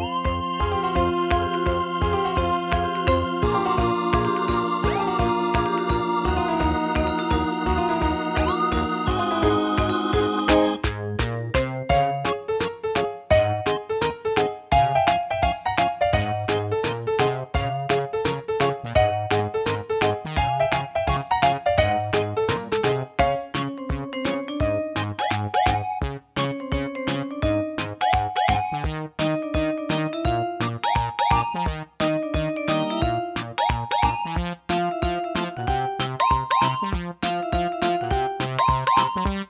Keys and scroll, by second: 0.0 BackSpace, 1.1 super+d, 36.2 super+c, 36.4 super+v.